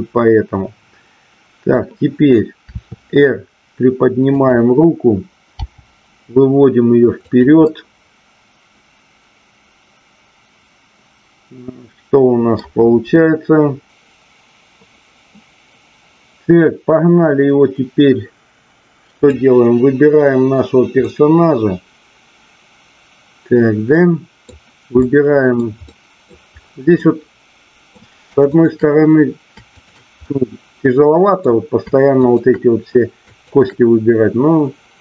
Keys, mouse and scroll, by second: 2.7 r, 4.3 click, 7.3 click, 7.6 scroll up 1, 7.8-12.5 middle drag, 13.8-15.4 middle drag, 21.0-24.5 middle drag, 25.0-25.7 middle drag, 25.8-26.4 middle drag, 26.9-27.9 middle drag, 30.5-31.5 middle drag, 32.2-32.8 shift+drag, 33.4-34.4 shift+drag.